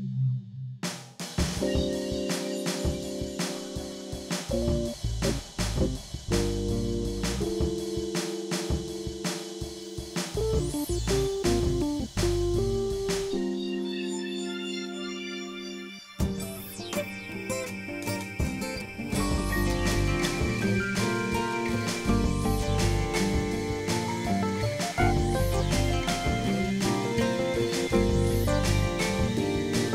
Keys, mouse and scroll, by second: 0.1 click, 0.8 x, 1.3 click, 2.4 click, 3.0 click, 4.9-6.8 drag, 8.0 click, 11.2-16.2 drag, 16.6 click, 17.4 click, 20.2-21.5 drag, 21.8-23.9 drag, 24.4 click, 25.0-26.4 drag, 26.6-27.9 drag, 28.1 click, 29.4 click.